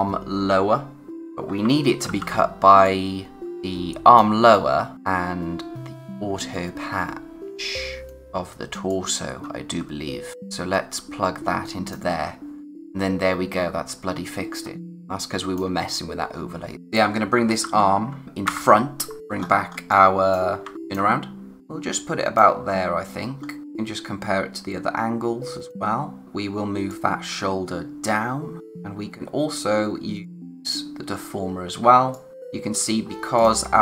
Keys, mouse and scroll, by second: 1.1 click, 2.1 ctrl+h, 2.9 click, 4.5 click, 4.9 space, 8.2 click, 9.5 space, 10.3 scroll up 1, 10.6 space, 13.2-14.9 scroll up 1, 14.9 space, 16.5-17.9 typing, 16.7 click, 19.2-19.9 scroll up 1, 19.9 click, 20.6 a, 20.9 click, 22.6-23.4 scroll down 1, 23.6 click, 31.0 scroll up 1, 32.1 click, 32.5 space, 33.0-33.4 scroll down 1, 33.4 click.